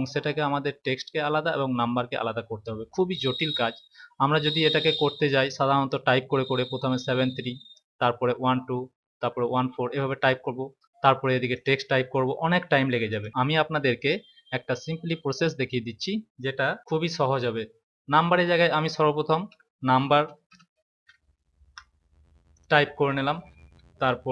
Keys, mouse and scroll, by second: 11.5 click, 13.0 click, 19.4-20.9 typing, 22.4 click.